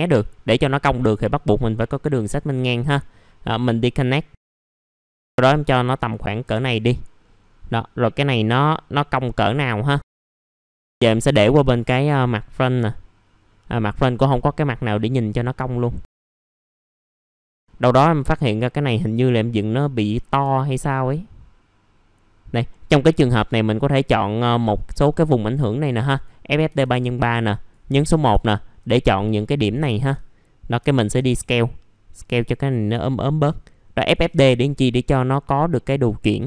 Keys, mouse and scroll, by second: 2.7-3.9 right drag, 4.3 click, 7.2 middle click, 7.3-7.9 scroll down 1, 8.2-10.4 drag, 10.5 middle click, 10.8 scroll down 1, 10.9 right click, 11.5-16.8 drag, 17.2 middle click, 17.3-17.8 scroll up 1, 17.8 click, 20.0 scroll up 1, 20.7-24.9 drag, 24.9 middle click, 26.1 click, 28.0-28.3 scroll up 1, 28.4 alt+middle click, 29.8 typing, 30.3-30.8 scroll down 1, 30.8 alt+middle click, 32.3-34.2 drag, 34.2 typing, 34.6-35.1 scroll down 1, 35.5 middle click.